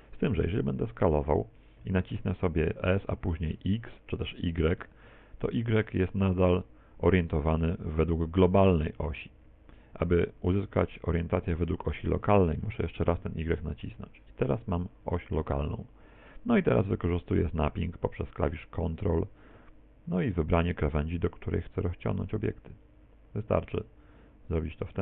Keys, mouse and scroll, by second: 1.9 s, 23.0 ctrl+click, 23.8 middle click.